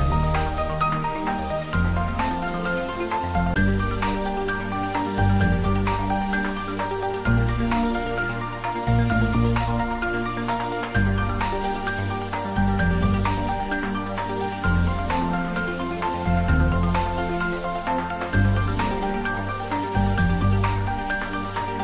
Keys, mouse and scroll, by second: 7.4 click.